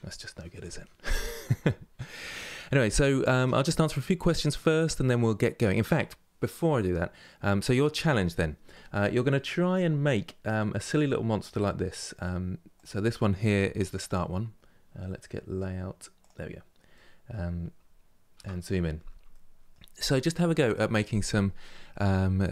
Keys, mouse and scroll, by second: 9.8-12.4 middle drag, 12.4 click, 15.9 click, 16.6-18.0 middle drag, 18.0 KP_Decimal, 18.5 scroll down 1, 19.0-22.0 middle drag.